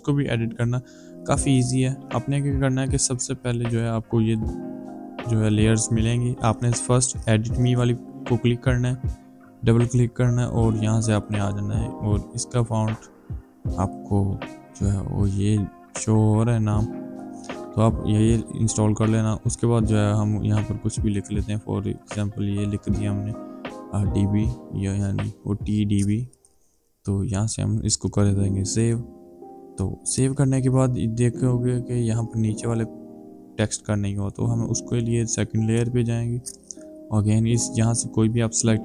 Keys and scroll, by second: 18.1 t, 20.6 shift+d, 21.0 shift+b, 22.4-23.2 typing.